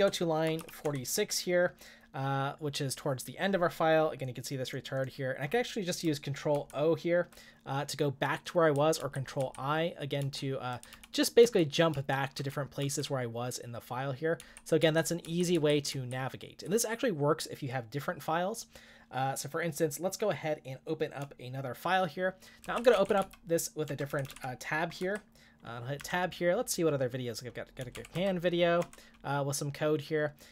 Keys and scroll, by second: 0.2-1.1 typing, 6.6 ctrl+o, 9.0 ctrl+i, 9.4 ctrl+i, 10.2 ctrl+i, 10.9 ctrl+o, 11.4 ctrl+o, 11.9 ctrl+o, 12.3 ctrl+o, 14.8 ctrl+o, 15.2 ctrl+i, 22.6-24.3 typing, 25.0 Tab, 26.0 Tab, 27.5-29.3 typing.